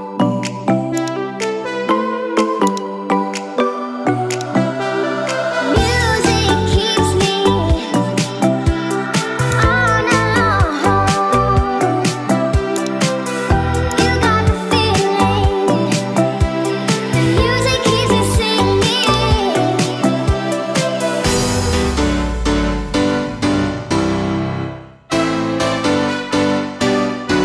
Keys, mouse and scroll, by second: 2.8 click, 4.4 click, 6.3 KP_0, 8.8 q, 14.0-17.9 drag, 18.8 q.